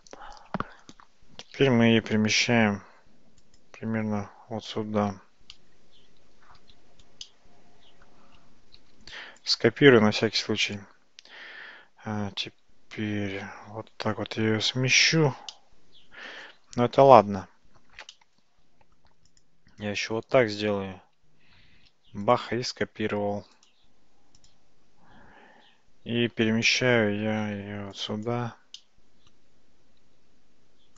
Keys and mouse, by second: 2.0 g, 7.3 shift+middle drag, 7.4-8.1 shift+drag, 8.8 shift+d, 10.8 click, 13.0 g, 15.6-16.4 middle drag, 18.2-19.0 middle drag, 21.7 shift+d, 23.7 right click, 27.6 g, 28.8-29.4 middle drag, 30.0 f.